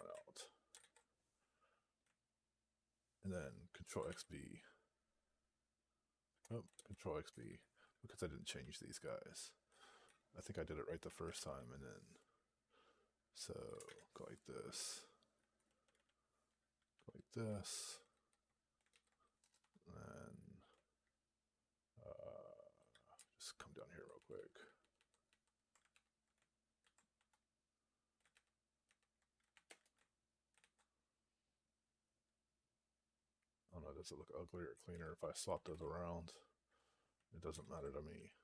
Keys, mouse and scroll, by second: 0.7 ctrl+s, 6.2 Return, 7.2 Return, 8.5 Up, 9.0 Up, 17.3 space, 19.3 BackSpace, 19.5 2, 26.7 ctrl+d, 29.5 space, 30.5 ctrl+s, 35.4 ctrl+a, 37.5 ctrl+s.